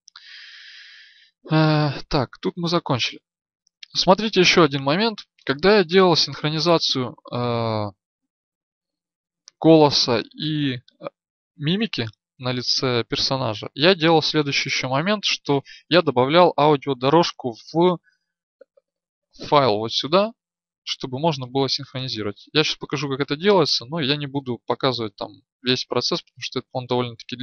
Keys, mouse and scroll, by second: 0.0 Escape, 0.0-6.1 drag, 26.6 click.